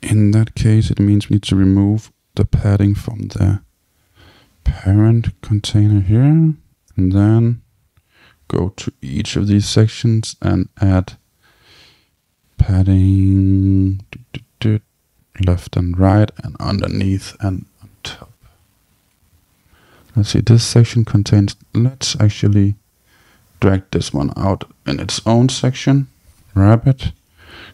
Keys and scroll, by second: 4.8 Tab.